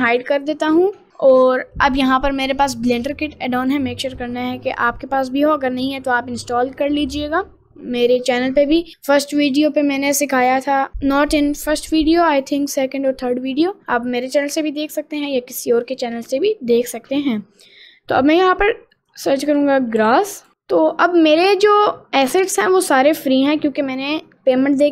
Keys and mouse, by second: 0.1 click, 19.1-20.5 drag, 20.5 s, 20.9 click, 24.1 middle click, 24.6 middle click.